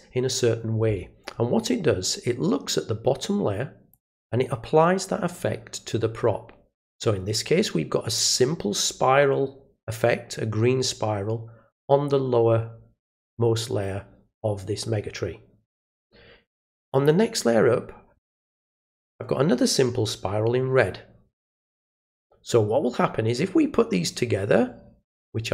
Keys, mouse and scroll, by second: 3.9 click, 8.1 click, 16.9 click.